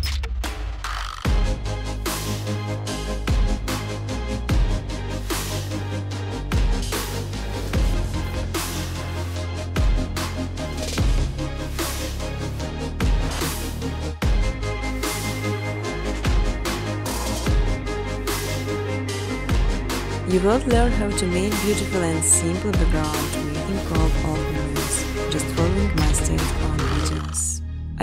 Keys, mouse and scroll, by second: 0.0-2.8 typing, 2.0 click, 2.9 click, 3.3 click, 3.9-5.5 typing, 4.2 click, 4.7 click, 5.6 click, 6.0 click, 6.8 click, 7.9 click, 8.6 click, 9.0 click, 9.7 click, 10.6 click, 11.5 click, 12.4-13.6 typing, 14.5 click, 16.1 click, 16.4-17.2 typing, 17.1 click, 18.1 alt+click, 18.5-20.1 typing, 21.0 click, 21.4-22.7 typing, 24.7 alt+click, 25.1-26.7 typing, 27.7 click.